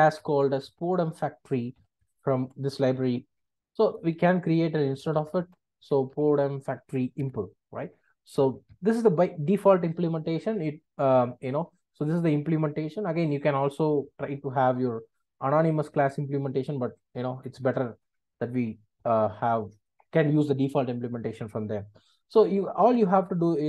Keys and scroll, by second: 2.0 Return, 7.3 Return, 23.1 Return.